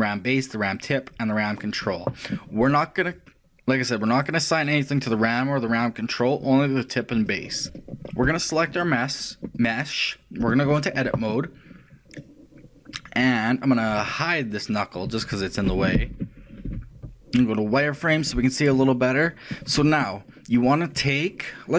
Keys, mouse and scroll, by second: 5.0-8.1 drag, 8.3 right click, 9.6 click, 12.7-14.3 middle drag, 14.3 right click, 16.1 ctrl+l, 16.7 h, 17.1 shift+middle click, 17.1 z.